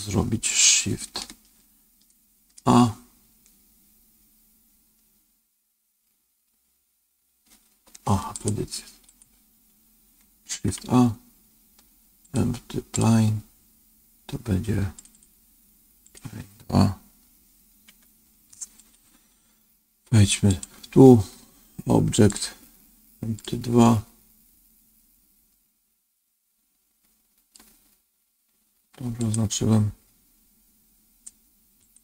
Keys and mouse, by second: 2.5 shift+a, 8.2 click, 10.6 shift+a, 14.9 click, 15.0-19.0 drag, 20.4 click, 22.3-23.4 drag, 25.4-27.5 middle drag, 29.1 click, 31.8 click.